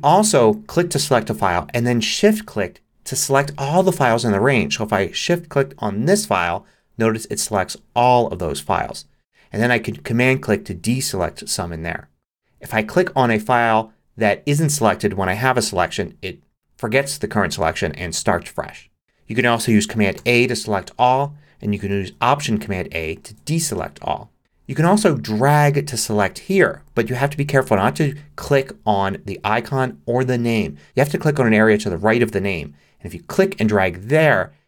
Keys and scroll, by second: 20.2 super+a, 23.2 alt+super+a.